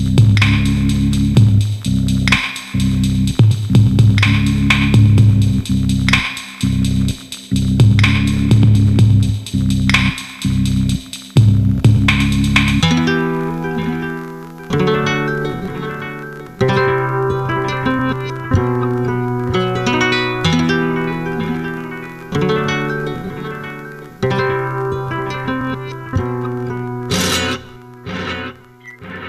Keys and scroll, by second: 25.2 Return.